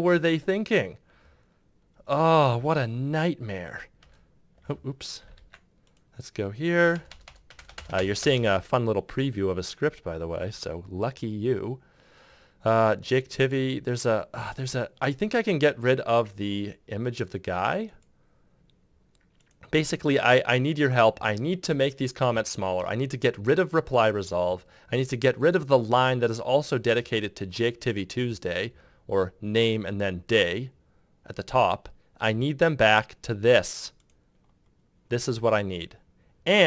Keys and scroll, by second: 3.8 Return, 5.1 ctrl+z, 6.5 Return.